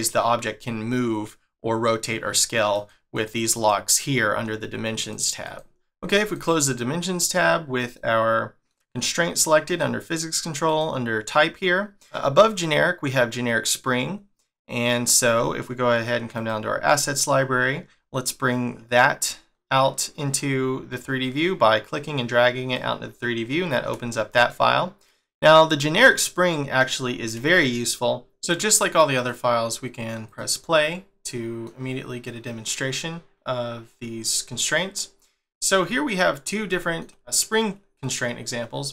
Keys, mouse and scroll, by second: 29.2 click, 30.2 click, 30.8 scroll down 1, 31.3 middle click, 32.0 scroll up 1, 33.3 scroll up 1, 35.4 shift+middle click, 35.9 scroll up 1, 36.7 shift+middle click.